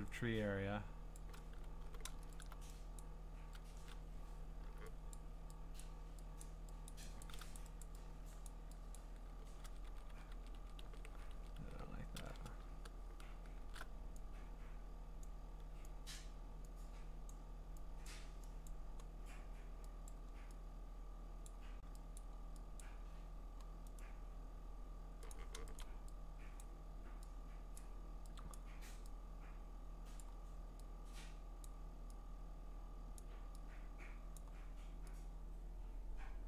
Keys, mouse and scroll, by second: 1.1 click, 1.8 b, 2.4 alt+click, 3.0 click, 3.7 ctrl+z, 4.6 u, 5.1 click, 5.8 click, 6.4 click, 6.9 click, 7.2 click, 7.6 click, 7.8 click, 8.5 click, 9.0 click, 9.7 ctrl+z, 9.9 ctrl+z, 10.1 ctrl+z, 10.3 ctrl+z, 10.6 ctrl+z, 10.8 ctrl+z, 11.1 ctrl+z, 11.3 ctrl+z, 11.6 ctrl+z, 13.6 alt+shift+r, 15.2 click, 16.2 click, 17.3 click, 18.1 click, 18.7 click, 20.1 click, 22.2 click, 22.8 click, 24.0 right click, 25.3 click, 25.8 click, 26.6 click, 27.8 click, 28.5 click, 30.2 click, 31.7 click.